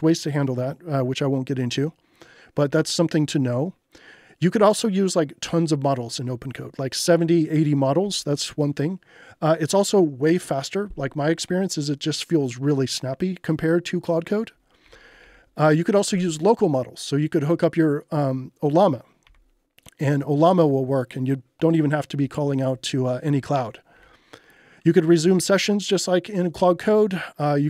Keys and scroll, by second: 2.7 j, 8.1 j, 14.9 j, 16.1 k, 19.2 j, 23.9 j, 25.2 k, 26.6 j.